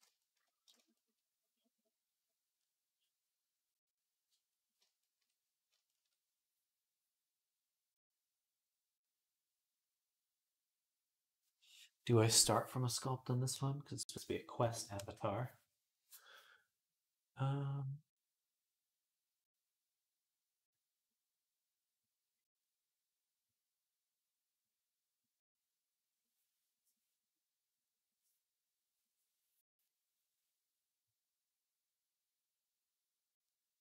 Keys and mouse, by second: 0.0-33.8 shift+middle drag.